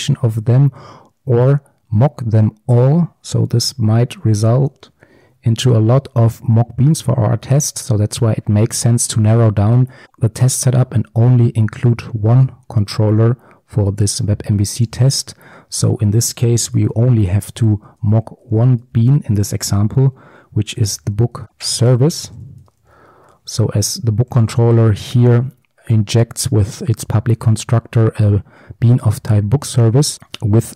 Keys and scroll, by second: 4.1 ctrl+alt+Left, 17.9 Return, 24.4 Return, 24.6 ctrl+b, 30.2 ctrl+alt+Right.